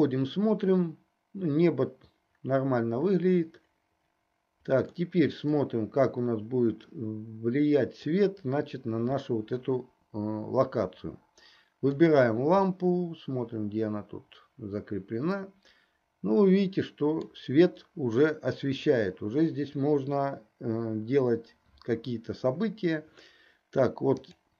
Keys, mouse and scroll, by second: 0.0 drag, 5.7-8.6 middle drag, 11.9-12.5 drag, 13.3-17.9 middle drag, 24.4 click.